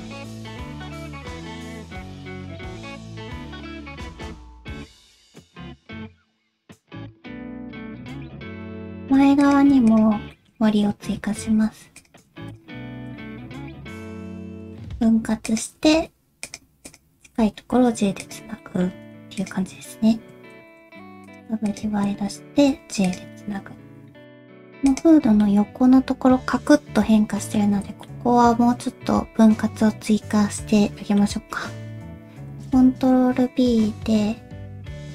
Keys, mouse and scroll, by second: 0.0 middle click, 0.2 middle click, 0.5 g, 1.4 middle click, 2.3 click, 2.5 g, 2.9 click, 3.1 shift+click, 3.6 g, 4.3 middle click, 4.5 shift+middle click, 4.5-4.8 scroll up 3, 4.5 alt+click, 4.7 alt+z, 4.8 middle click, 5.0 alt+z, 5.3 middle click, 5.3 g, 5.8 middle click, 6.2 middle click, 6.5 scroll up 1, 7.0 g, 8.5 alt+z, 8.5 shift+middle click, 8.5 scroll up 1, 8.6 middle click, 9.1 2, 9.4 click, 9.9 shift+click, 10.3 shift+middle click, 11.2 ctrl+w, 11.6 1, 11.9 click, 12.5 shift+click, 14.6 j, 15.4 click, 15.7 g, 16.8 click, 17.2 g, 18.6 middle click, 19.1 2, 19.4 click, 20.5 ctrl+w, 21.0 1, 21.2 click, 21.7 shift+click, 22.7 j, 23.0 click, 23.3 middle click, 23.8 g, 24.2 middle click, 24.8 alt+2, 24.9 alt+click, 25.4 middle click, 28.0 middle click, 32.5 ctrl+b.